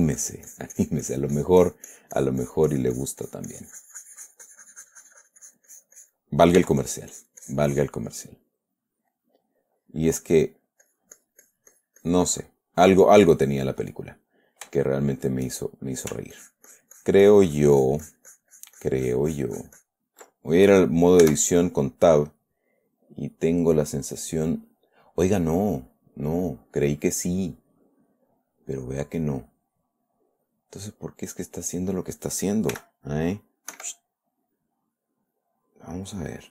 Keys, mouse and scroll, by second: 7.0 f, 7.2 click, 7.6 click, 8.6 click, 9.6 click, 10.4 click, 11.2-13.0 drag, 13.3 middle click, 14.3 middle click, 15.2-16.6 shift+middle drag, 16.7-20.4 ctrl+shift+drag, 21.6 Tab, 22.9 click, 23.1-29.1 middle drag, 29.2 middle click, 30.5 middle click, 33.1 g, 34.1 Escape.